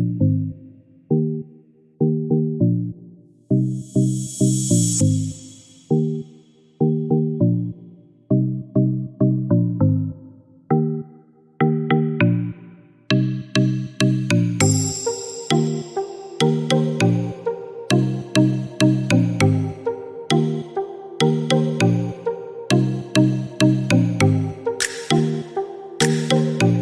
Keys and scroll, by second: 12.7 5, 13.4 Return.